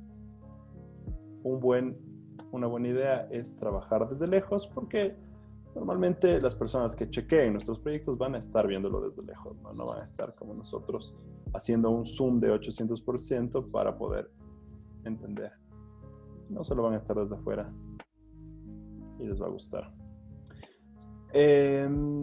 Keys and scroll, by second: 4.5 z, 5.3 z, 6.6-7.2 typing, 9.0 b, 17.7 z, 20.0 z, 21.3-22.0 typing.